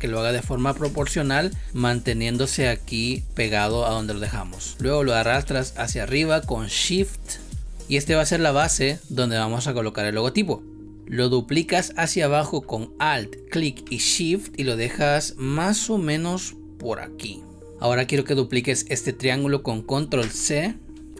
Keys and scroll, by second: 0.7 space, 7.7 space, 10.8 space, 20.9 ctrl+c.